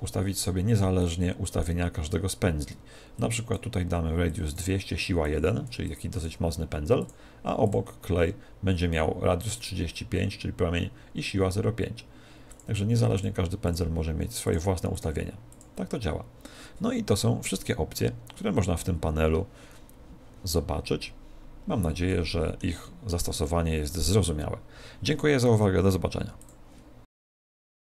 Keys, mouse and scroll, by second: 3.1-8.9 drag, 12.5-16.7 drag, 22.0-25.1 middle drag.